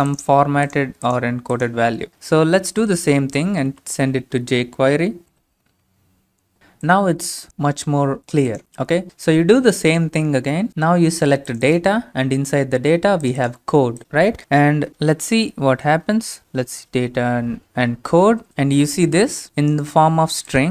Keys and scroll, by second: 2.7 shift+space, 3.2 Down, 3.6 space, 3.6 |, 5.0-5.8 typing, 14.9 Up, 16.1-18.5 typing, 16.5 Right.